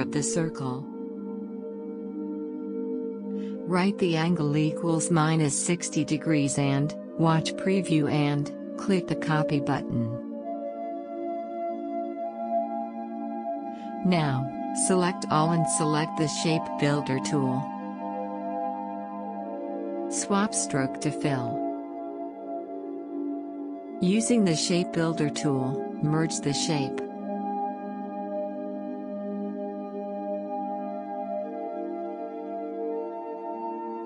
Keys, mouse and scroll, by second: 0.0 alt+click, 4.8 typing, 7.1 click, 9.9-18.7 drag, 21.9 click, 24.1-34.0 drag.